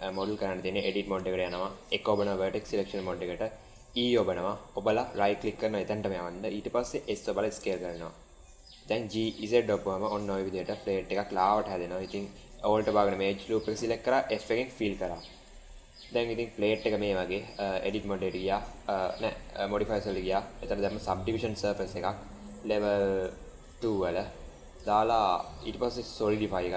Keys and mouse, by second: 0.7 Tab, 1.3 shift+middle click, 1.9 1, 3.8 e, 6.8 s, 8.9 g, 12.1 alt+click, 14.2 f, 15.3 Tab, 15.6-16.9 middle drag, 17.8 drag, 19.9-21.5 drag, 23.5 click, 25.5-26.7 drag.